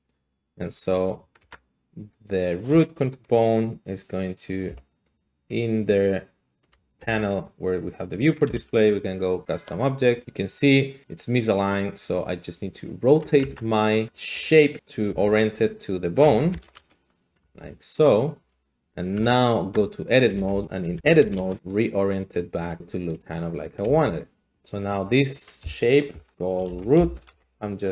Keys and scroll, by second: 1.4 Tab, 4.6 a, 6.6 a, 7.0 a, 8.4 e, 13.4 Tab, 14.3 `, 15.1 `, 16.2-17.4 typing, 16.8 Return, 18.4 s, 19.1 Tab, 19.6 Tab, 19.7 Tab, 20.3-23.8 typing, 23.2 Tab, 26.2 Escape, 26.6-27.4 typing.